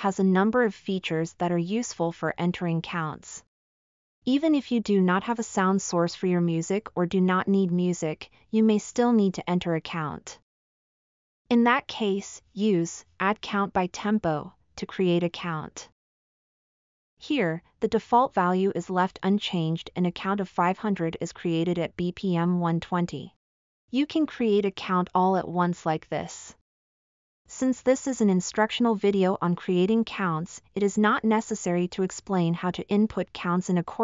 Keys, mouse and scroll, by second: 21.4-23.5 drag.